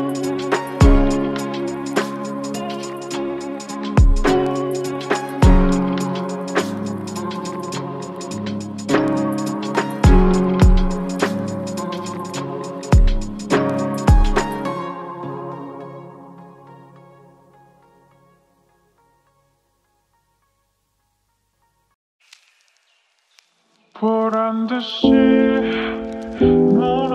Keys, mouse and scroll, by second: 6.1-7.3 typing, 9.7-11.1 typing, 20.8-22.2 typing, 24.1-25.5 typing.